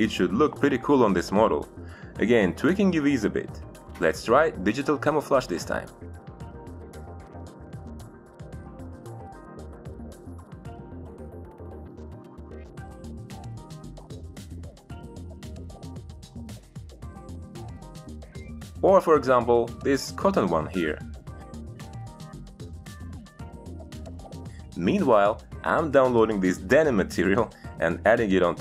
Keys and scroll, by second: 2.2 Return, 12.1 Delete, 13.0 Delete, 15.3 ctrl+z.